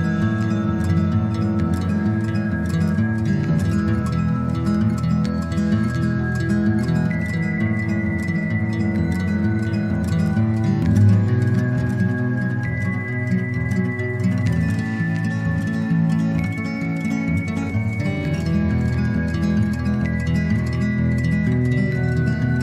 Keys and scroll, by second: 5.9 ctrl+-.